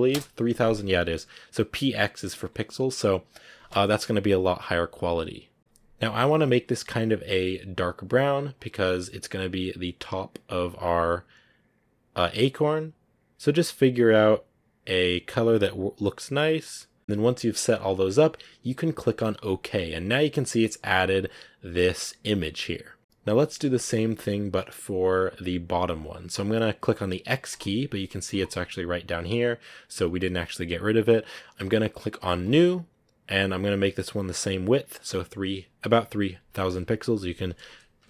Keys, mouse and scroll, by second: 22.6-23.9 scroll up 3, 24.4-27.4 middle drag, 27.4-38.0 drag.